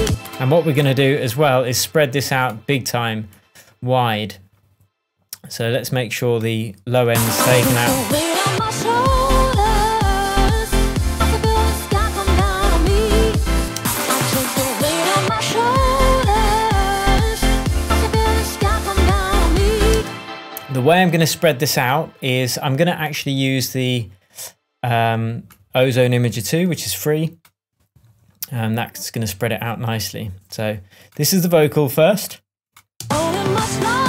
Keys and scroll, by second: 0.0 space, 7.0 space, 13.5 space, 19.9 space, 32.9 space.